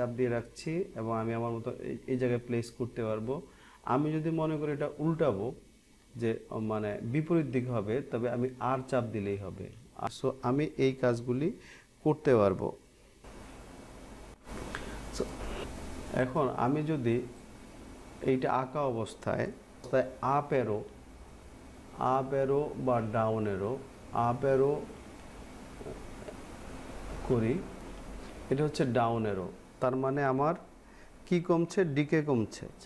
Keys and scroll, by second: 10.4 r, 24.9 Up, 31.3 Down.